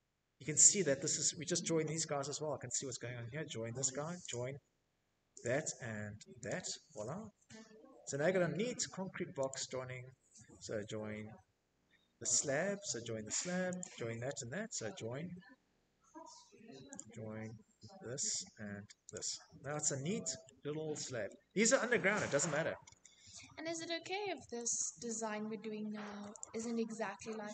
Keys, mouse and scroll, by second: 2.6 click, 3.8 click, 4.8 click, 5.3 scroll, 6.0 middle click, 6.5 shift+middle click, 6.6 shift+middle click, 6.7 middle click, 6.8 middle click, 6.8 middle click, 6.9 middle click, 7.8 click, 8.8 Escape, 9.8 Escape, 10.8 Escape, 10.9 typing, 11.0 middle click, 11.1 Escape, 11.1 middle click, 11.3 Escape, 12.1 click, 12.8 Escape, 15.3 click, 16.6 click, 17.5 click, 17.8 Escape, 18.0 middle click, 18.0 middle click, 18.2 middle click, 19.6 shift+middle click, 19.9 middle click, 20.0 middle click, 20.1-20.6 scroll, 22.6-24.1 typing, 24.1 shift+middle click, 24.6 shift+middle click, 24.7 click, 25.5 t, 26.9 click.